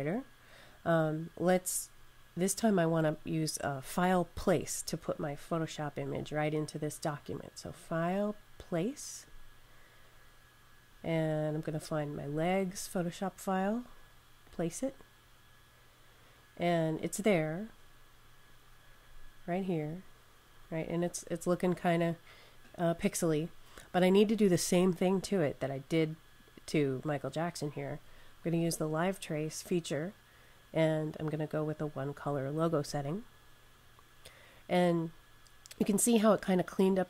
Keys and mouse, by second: 5.9 click, 9.1 click, 12.4 click, 18.3 click, 20.7 click, 29.2 click, 32.6 click, 35.0 click.